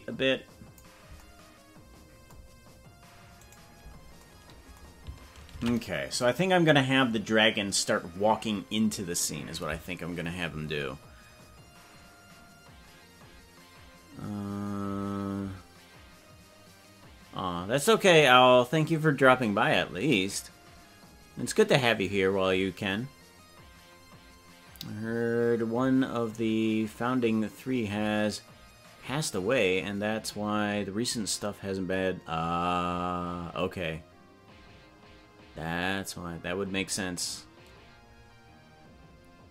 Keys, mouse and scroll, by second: 3.9 right click, 8.1 ctrl+s.